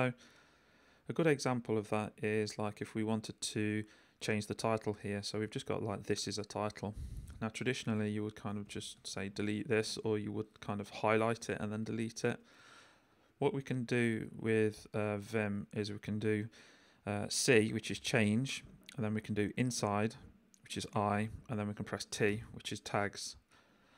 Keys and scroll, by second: 0.9 h, 1.4 j, 2.0 k, 7.7 l, 8.5 x, 12.4 u, 15.1 j, 15.5 k, 17.9 c, 19.8 i, 22.3 t.